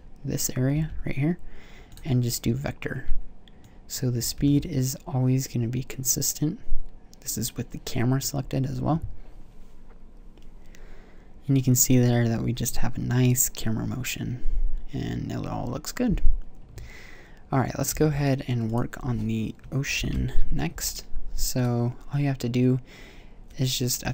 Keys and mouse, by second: 1.0 v, 4.6 alt+a, 18.1 alt+a, 19.2 click, 20.2 shift+Left, 21.8-23.4 drag.